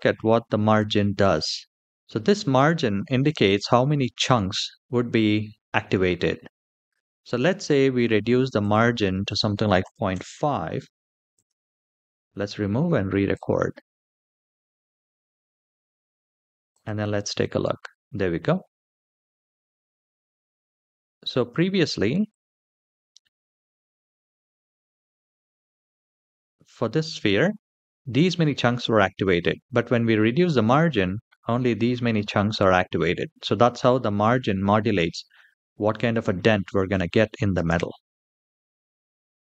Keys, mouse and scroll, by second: 8.3-9.9 drag, 11.0 click, 13.0-14.9 drag, 14.9 typing, 16.4 click, 20.6 click, 22.0-25.8 drag, 35.6-36.6 middle drag, 37.3 space, 37.9-39.5 middle drag.